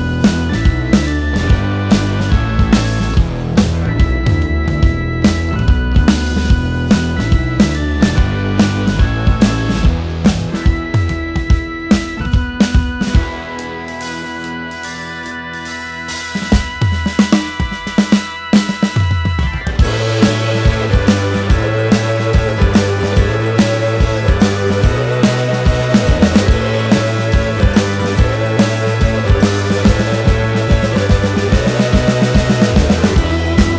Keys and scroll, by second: 1.8 h, 4.0 ctrl+z, 4.7 space, 5.6 q, 11.3 space, 15.2 space, 17.3 Delete, 18.8 Delete, 26.2 space, 29.5 Delete.